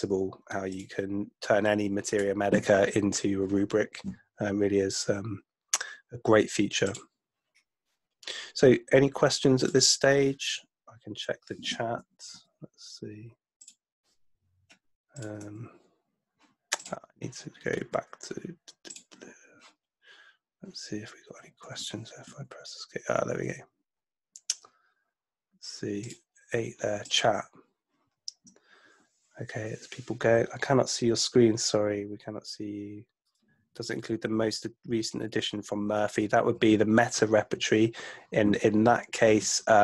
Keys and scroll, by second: 12.4 super+Tab, 15.4 super+Tab, 17.7 super+Tab, 22.3 ⟲.